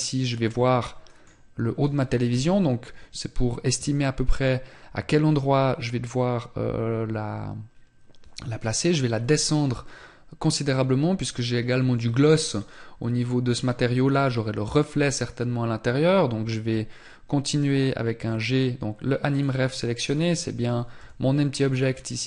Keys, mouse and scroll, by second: 1.8 scroll down 1, 19.4 scroll down 2.